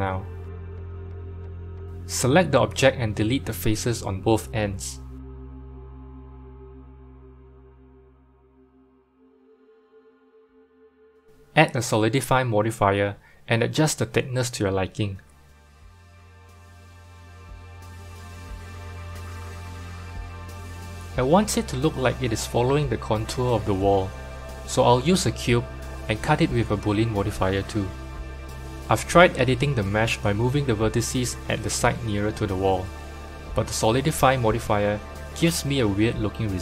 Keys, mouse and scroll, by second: 0.9 click, 2.6 Tab, 3.0-4.1 middle drag, 4.1 3, 4.6 click, 6.8 x, 9.1 Tab, 10.8 click, 12.3-14.9 drag, 14.9-17.7 middle drag, 17.7-21.5 shift+drag, 21.5-23.2 middle drag, 23.2 KP_7, 24.3 click, 24.6-25.8 scroll down 3, 25.8 shift+a, 27.5-28.6 scroll down 6, 28.6 g, 29.7-31.3 scroll up 10, 31.3 g, 33.5 r, 34.7 g, 36.5 r.